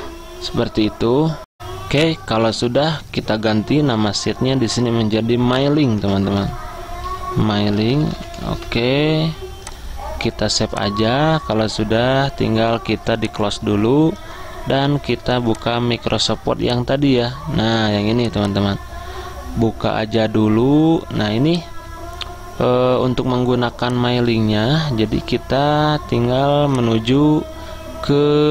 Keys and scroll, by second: 0.0-0.3 typing, 1.6 ctrl+s, 1.6 alt+Tab, 6.1 ctrl+a, 7.2-9.1 typing.